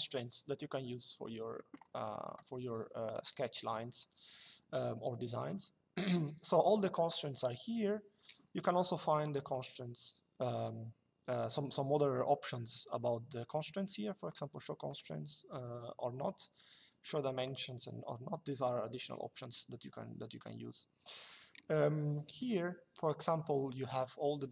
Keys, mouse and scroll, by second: 8.9 click, 14.0 click, 16.8 click.